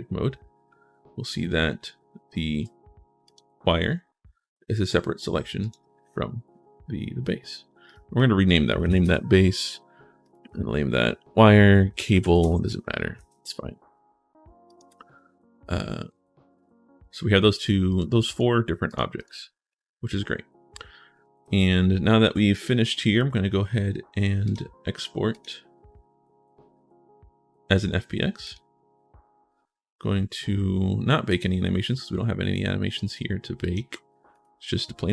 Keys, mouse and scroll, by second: 0.1-0.7 scroll up 1, 0.7-1.1 scroll down 1, 1.5 shift+right click, 3.0 click, 5.5 click, 7.6 click, 8.4-9.3 typing, 10.0 click, 11.4-12.5 typing, 13.0 ctrl+shift+s, 14.5 click, 17.7 click, 18.1 click, 18.6 click, 19.0 click, 19.8-21.1 scroll up 1, 21.5 shift+scroll up 1, 21.8-22.6 shift+scroll down 2, 23.0 scroll up 1, 24.2 click, 25.1 click, 28.2 click, 31.1 click, 33.4 click, 34.1 click.